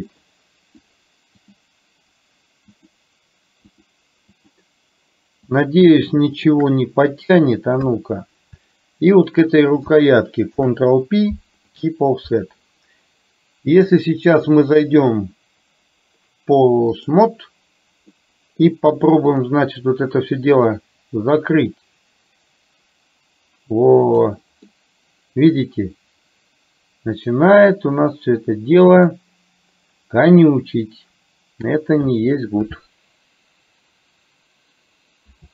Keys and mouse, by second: 0.2 shift+click, 0.9 shift+click, 2.9 shift+click, 3.9 shift+click, 4.4 shift+click, 5.6 shift+click, 6.4 shift+click, 7.9 KP_1, 9.1 shift+click, 10.5 ctrl+p, 14.0-17.2 drag, 18.2 middle click, 20.6-25.2 drag, 25.2-29.2 middle drag, 35.4 ctrl+z.